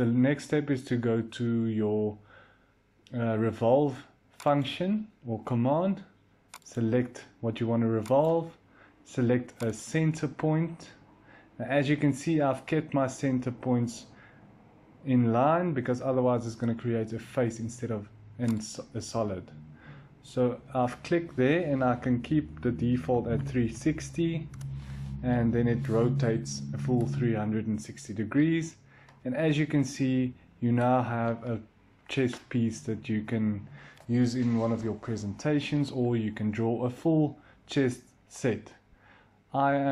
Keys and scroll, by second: 22.7-25.9 typing, 24.4 Return.